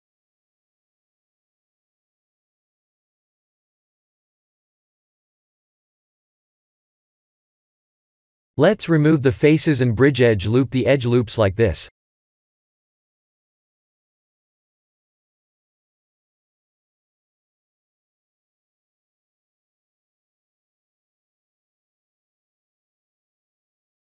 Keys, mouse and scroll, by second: 1.5 middle click, 2.7 x, 5.5 middle click, 6.9 shift+z, 7.3 2, 7.7 scroll up 2, 8.1 shift+middle click, 9.4 alt+click, 10.2 alt+shift+click, 11.4 ctrl+z, 12.1 alt+shift+click, 13.6 ctrl+e, 15.3 middle click, 18.1 KP_1, 19.0 shift+z, 20.6 middle click, 22.1 click.